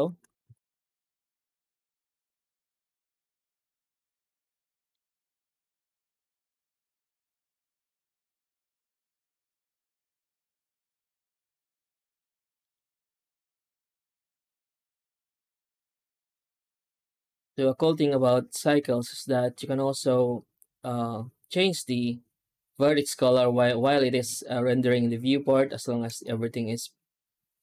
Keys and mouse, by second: 0.3 z, 2.9-4.8 middle drag, 5.3 shift+a, 8.5-12.1 drag, 12.5 middle drag, 14.0 z, 15.1 middle drag, 15.5 ctrl+s, 17.4-18.5 middle drag, 18.8-21.4 shift+middle drag, 26.1-27.6 middle drag.